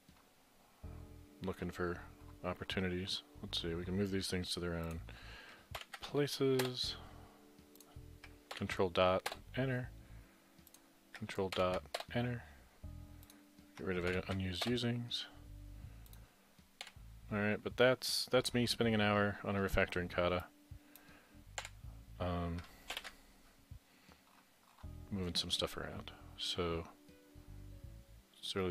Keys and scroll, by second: 5.8 ctrl+., 6.6 Return, 9.3 Return, 12.0 Return, 16.9 Delete, 23.0 ctrl+shift+b.